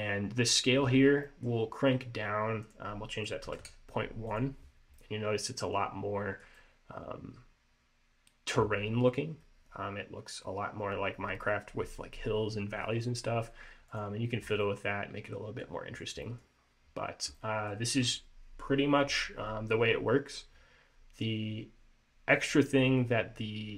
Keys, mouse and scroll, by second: 1.4 middle click, 2.8 click, 5.1 middle click, 6.7 middle click, 14.0 click, 14.7 middle click, 16.0-16.3 scroll down 2, 16.3 middle click, 16.8-17.5 scroll down 5, 17.5 middle click, 18.1-19.1 scroll up 1, 23.3-23.7 scroll down 2.